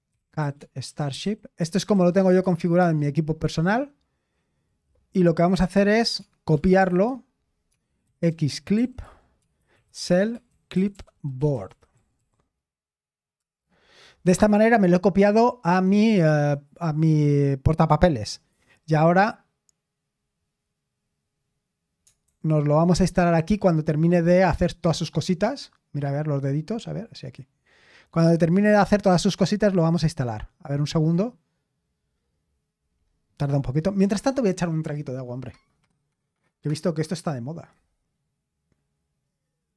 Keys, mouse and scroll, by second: 0.0-12.7 typing, 13.4 Return, 15.6-16.4 typing, 22.3 super+h.